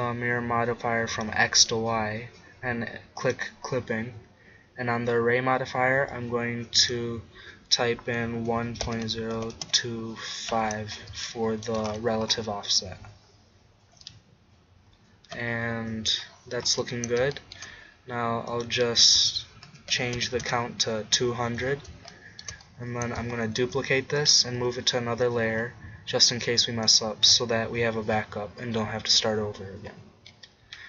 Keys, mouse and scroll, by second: 0.4 middle click, 1.2-4.9 drag, 4.9 middle click, 6.8-8.6 drag, 10.6 middle click, 11.3-15.9 drag, 15.9-17.8 middle drag, 18.5-22.8 drag, 20.2 0, 20.4-21.4 middle drag, 20.4-21.4 right drag, 23.7 shift+d, 24.6 m, 25.5 m, 29.6 middle click.